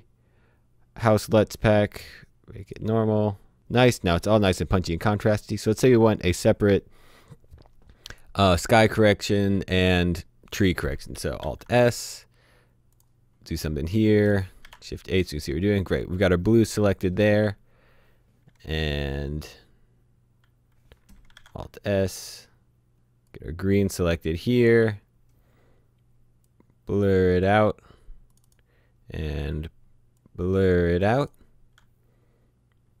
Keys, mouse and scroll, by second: 2.5 click, 10.8 click, 11.4 s, 12.9 click, 14.6 h, 15.2 click, 21.2 click, 21.4 s, 23.2 click, 26.4 click, 30.2 click.